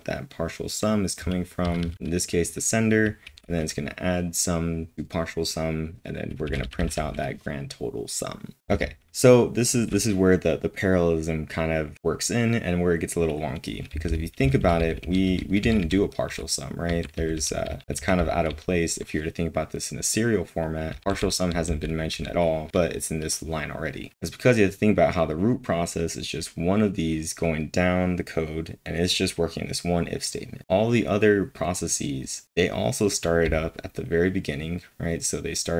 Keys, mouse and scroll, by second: 1.3 typing, 3.2 typing, 4.8 typing, 6.4-10.3 typing, 11.8 typing, 13.9 typing, 16.9-19.0 typing, 33.2-35.4 typing.